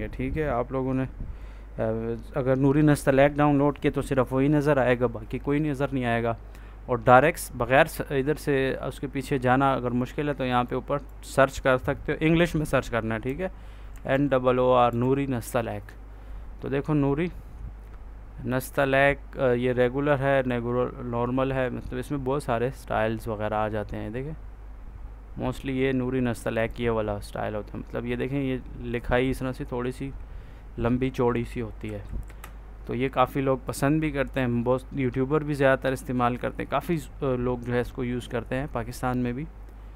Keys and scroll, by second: 13.1 n, 13.8 o, 14.8 r, 31.7 Right.